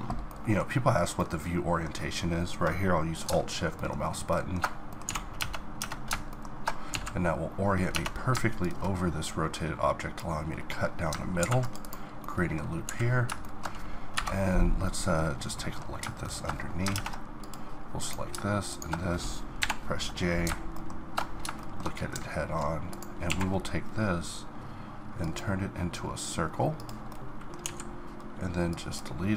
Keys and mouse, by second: 0.5 middle click, 4.9 middle click, 5.0 z, 5.4 Tab, 5.8 Tab, 6.9 z, 7.9 Tab, 10.6 middle click, 11.4 ctrl+r, 12.4 middle click, 12.9 z, 14.1 KP_Divide, 16.9 ctrl+Tab, 18.0-19.6 drag, 19.6 j, 20.7-23.3 middle drag, 23.3 q, 24.2 q, 27.1 middle click, 27.6 x, 28.6-29.3 middle drag.